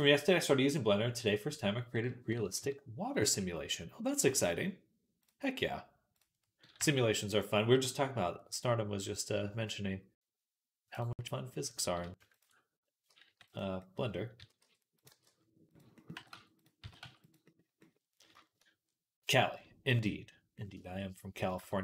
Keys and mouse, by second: 2.4 KP_Decimal, 2.5-4.7 drag, 4.7-8.2 right drag, 6.6 g, 8.8-13.8 right drag, 10.8 click, 10.8 middle click, 12.1 ctrl+click, 12.1 ctrl+middle click, 12.9 g, 14.2 s, 15.0 g, 16.0 g, 16.7 s, 17.7-19.9 right drag, 21.2 right click, 21.3 click, 21.4 shift+middle click.